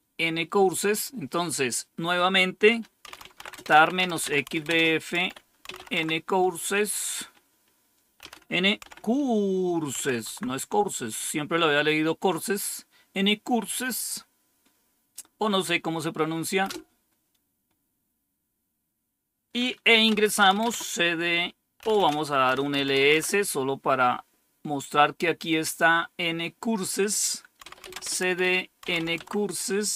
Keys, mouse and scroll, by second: 1.0 scroll down 2, 2.7-6.2 typing, 8.1-8.7 typing, 9.8-10.6 typing, 16.6 Return, 20.0-20.5 typing, 21.7-23.4 typing, 27.3-29.4 typing.